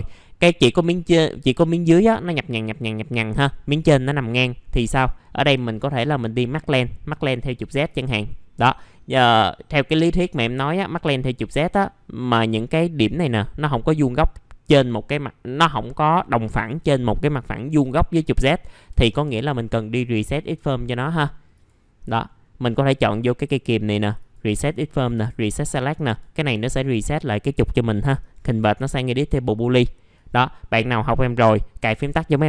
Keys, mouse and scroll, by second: 5.6 alt+middle click, 7.8-12.2 drag, 18.9 1, 21.0 click, 28.2-29.2 right drag, 30.1 click.